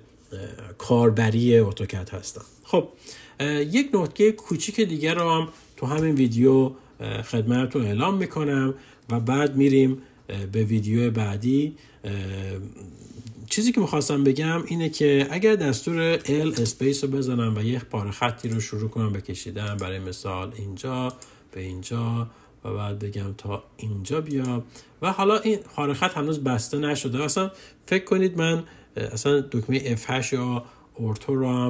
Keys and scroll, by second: 15.7 l, 16.6 space, 29.9 F8.